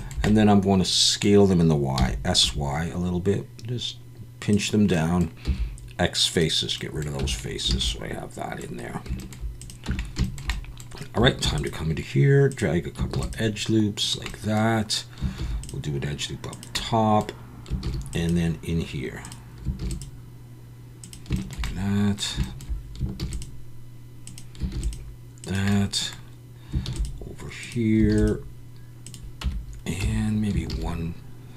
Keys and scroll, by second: 2.0 s, 2.4 y, 5.4 x, 7.2 Tab, 7.8 alt+a, 9.9 Tab, 11.4 ctrl+r, 13.1 ctrl+r, 15.4 ctrl+r, 17.8 ctrl+r, 19.8 ctrl+r, 23.2 ctrl+r, 24.7 ctrl+r, 26.9 ctrl+r, 28.1 ctrl+r, 29.4 Tab, 30.0 Tab, 30.7 ctrl+r.